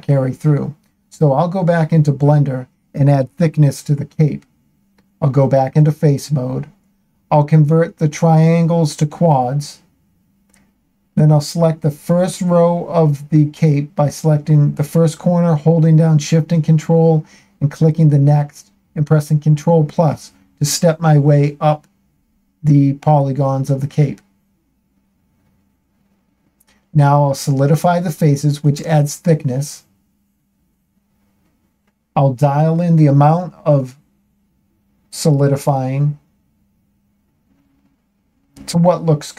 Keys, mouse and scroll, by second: 2.1 click, 2.9 Tab, 5.8 space, 8.6 shift+middle click, 10.2 a, 10.4 a, 11.8 click, 13.9 ctrl+shift+click, 15.9 ctrl+KP_Add, 16.2-20.5 ctrl+KP_Add, 23.4 space, 29.1 shift+middle click, 32.1 click, 34.0 click, 34.3 click, 34.6 click, 34.9 click, 37.1-38.9 shift+middle drag.